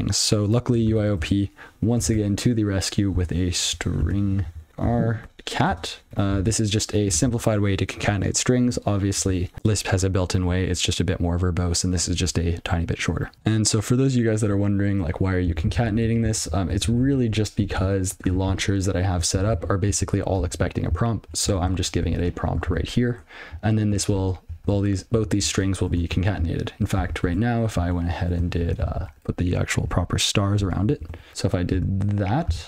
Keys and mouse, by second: 0.6-2.0 typing, 3.1-5.7 typing, 6.8 alt+j, 7.6 ctrl+alt+f, 9.5 alt+j, 13.3 ctrl+p, 16.7 ctrl+f, 19.2 ctrl+f, 20.5 ctrl+alt+b, 21.5 ctrl+n, 22.5 ctrl+a, 23.3 Tab, 24.5 ctrl+f, 26.5 ctrl+n, 28.2 ctrl+p, 28.6 shift+7, 29.3 alt+b, 31.3 Return, 31.7 ctrl+d.